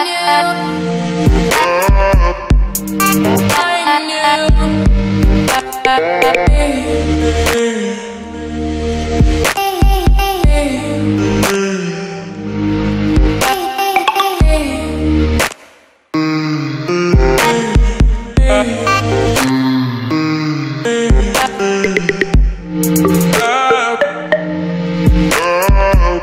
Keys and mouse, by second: 0.3 g, 1.2 s, 1.8 g, 4.3 g, 4.9 g, 5.9 s, 6.8 g, 8.3 g, 10.7 middle click, 11.3 g, 11.7 middle click, 11.8 s, 12.4 middle click, 13.2 middle click, 13.4 g, 13.8 middle click, 14.3 a, 14.7 middle click, 16.0-17.7 middle drag, 17.7 z, 18.5 middle click, 19.0 alt+g, 19.4 z, 19.9 r, 20.1 middle click, 20.2 Tab, 20.4 ctrl+t, 20.9 middle click, 21.8 middle click, 22.5 v, 23.1 x, 23.6 Tab, 24.2 z, 25.0 middle click, 25.1 g, 25.5 middle click, 25.7 r.